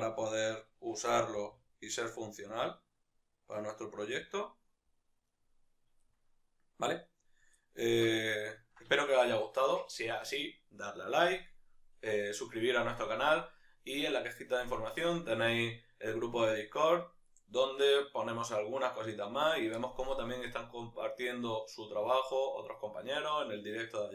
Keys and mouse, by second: 0.2-0.8 right drag, 0.8-5.2 middle drag, 1.2 g, 4.1 g, 5.2 right click, 5.8-24.1 middle drag.